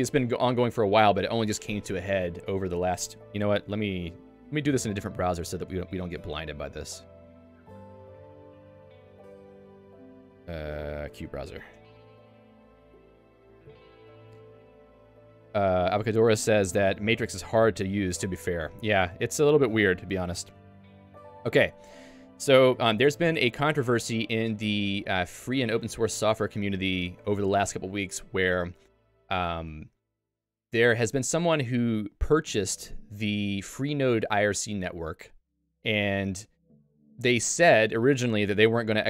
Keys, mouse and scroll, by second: 11.6 Return.